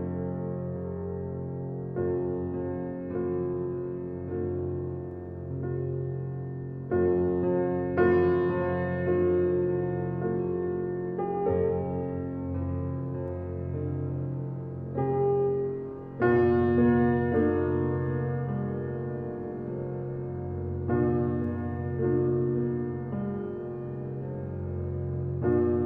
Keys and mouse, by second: 0.0 click, 0.8 click, 1.9 click, 3.7 click, 6.6 click, 7.4 click, 7.9 4, 8.3 0, 8.5 Return, 9.3-12.4 drag, 12.8 click, 15.1 click, 16.3 click, 18.1 click, 19.4 click, 22.8 click, 23.9 click, 24.7 click.